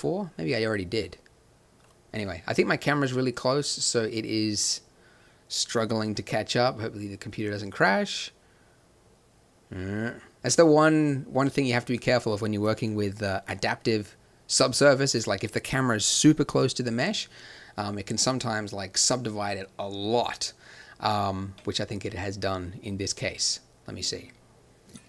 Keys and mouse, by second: 0.3-5.3 drag, 11.9-13.8 drag, 13.8-15.3 middle drag.